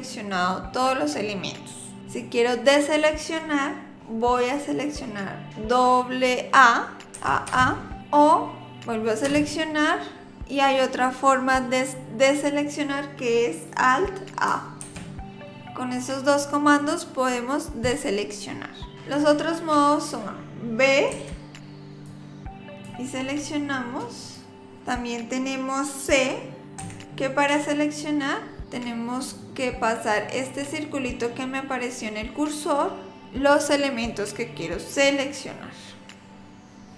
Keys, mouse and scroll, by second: 7.1 a, 7.5 a, 9.3 a, 14.9 alt+a, 21.1 b, 26.8 c.